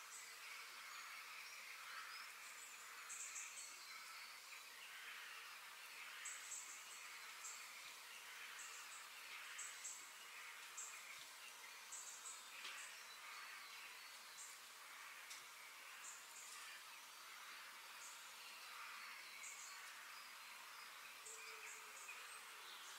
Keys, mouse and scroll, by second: 3.2-5.1 middle drag, 15.6 g.